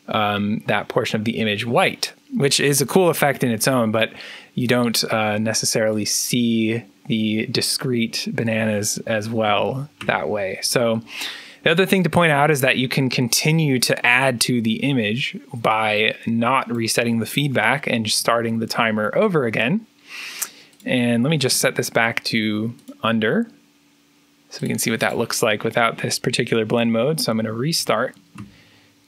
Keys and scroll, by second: 3.1 p, 9.4 2, 9.9 3, 12.8-15.5 typing, 18.0 3, 21.4 p, 25.4 p, 26.8-29.0 typing.